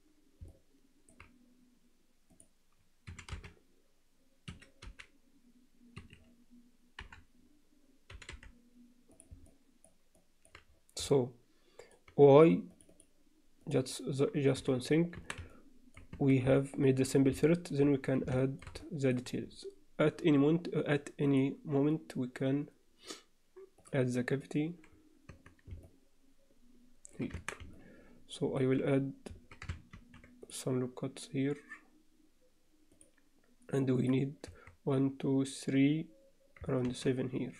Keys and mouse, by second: 0.5 alt+middle click, 3.1 e, 4.8 g, 7.0 KP_7, 8.1 g, 9.4 alt+middle click, 10.2 alt+middle click, 11.1 alt+middle click, 12.8 click, 13.6 click, 13.8 click, 14.6 f, 15.2 Tab, 15.5-16.0 alt+middle drag, 16.1 Tab, 16.5 alt+middle click, 17.4 middle click, 18.4 alt+shift+middle click, 18.8 alt+middle click, 21.3-24.8 drag, 25.3 Tab, 25.8-27.2 alt+middle drag, 27.4 Tab, 27.8 alt+middle click, 29.9 ctrl+r, 34.0 click, 34.5 1, 36.8 ctrl+r.